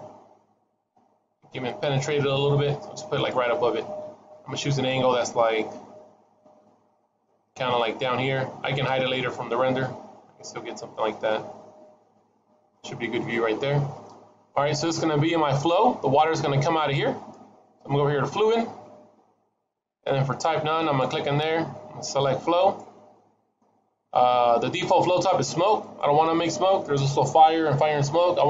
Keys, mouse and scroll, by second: 3.4-4.2 scroll down 3, 3.7 middle click, 5.0-5.4 scroll down 2, 5.3 middle click, 6.5 middle click, 7.2-7.6 scroll up 3, 7.6 middle click, 8.9 middle click, 11.1 shift+middle click, 13.4 middle click, 18.2 click, 20.7 click, 25.7 click.